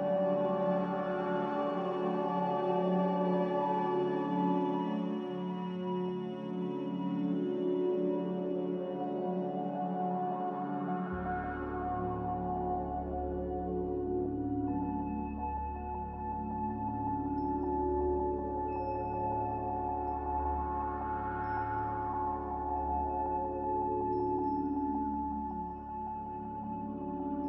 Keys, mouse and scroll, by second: 1.4 Return, 1.4 1, 17.1 a, 21.8 s, 23.7-24.6 typing, 25.5 Tab, 25.8-26.5 typing.